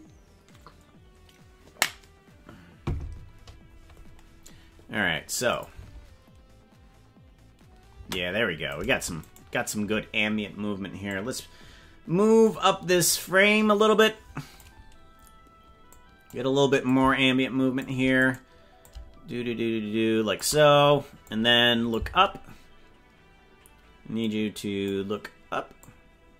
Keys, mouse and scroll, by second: 5.5 click, 5.8 space, 7.9 space, 8.8 right click, 9.3 shift+right click, 11.0-12.5 drag, 14.0 click, 15.9 click, 16.9-17.9 shift+drag, 18.3 right click, 18.8-20.4 shift+drag, 21.3 click, 24.3 click, 25.9-26.3 drag.